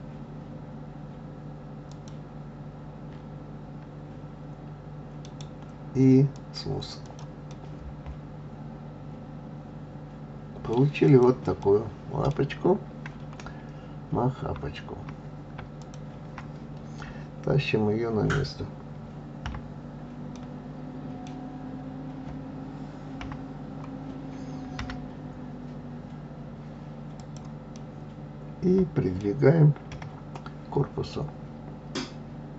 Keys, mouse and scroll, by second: 5.2-7.0 right drag, 7.0 click, 7.5-10.5 middle drag, 11.1 click, 11.6-14.6 middle drag, 15.8 shift+click, 19.4 KP_3, 20.3-23.2 middle drag, 23.2 KP_3, 24.8 g, 27.7-29.9 middle drag, 29.9 KP_1.